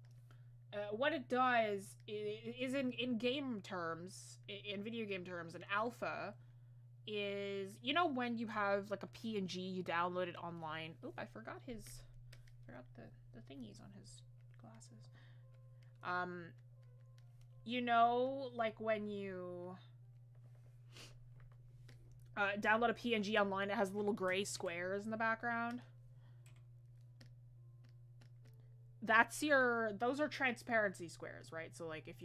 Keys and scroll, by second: 19.1 ctrl+z.